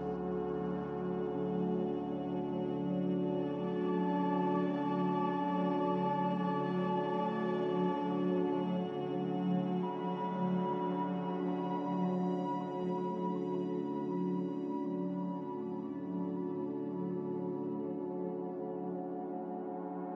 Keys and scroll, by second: 1.2 x, 2.3-3.1 typing, 9.8 g, 12.0 z, 14.0 n, 15.9 b, 17.4 Delete, 19.0 a.